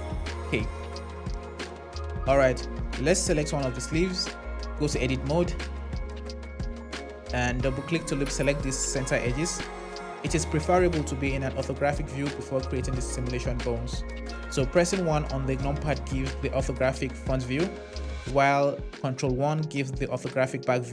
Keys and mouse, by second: 4.7 Tab, 6.7 click, 7.8 click, 14.9 KP_1, 18.9 ctrl+KP_1.